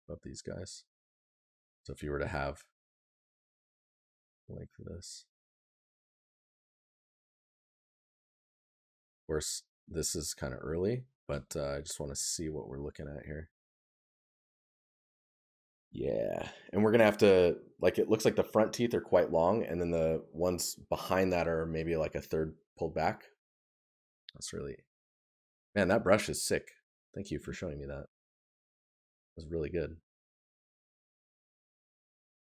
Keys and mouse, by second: 12.1 right click.